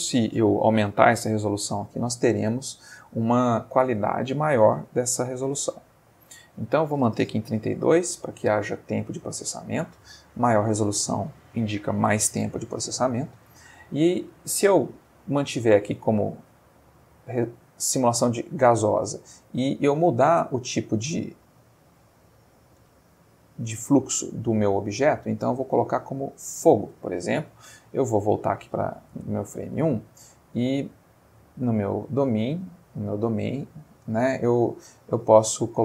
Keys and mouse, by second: 1.8 6, 1.9 4, 2.4 Return, 6.6 click, 7.8 3, 7.8 2, 8.0 Return, 14.5 click, 15.8 click, 17.0 click, 19.8 click, 25.0 click, 26.2 click, 27.8 click, 29.2 space, 29.7 Escape, 31.4 click, 32.2-33.0 middle drag, 35.2 click.